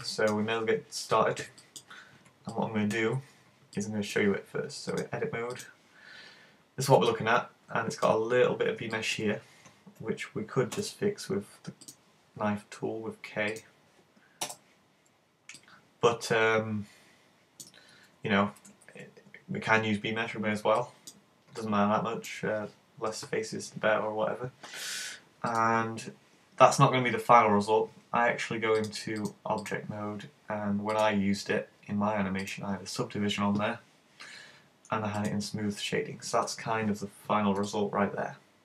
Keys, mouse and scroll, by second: 0.0 middle click, 5.0 click, 6.0-6.6 scroll up 1, 6.6 scroll up 1, 7.1 middle click, 8.2-9.0 scroll up 6, 9.0 shift+middle click, 10.8 k, 15.6 middle click, 17.6-18.1 scroll down 4, 18.0 super+z, 18.6 z, 19.7-20.3 scroll down 2, 20.8 middle click, 21.2-21.6 scroll down 3, 21.6 middle click, 25.5 click, 28.8 click, 31.0 click, 35.2 click, 36.3 scroll up 1, 36.7 scroll down 3, 37.6 middle click.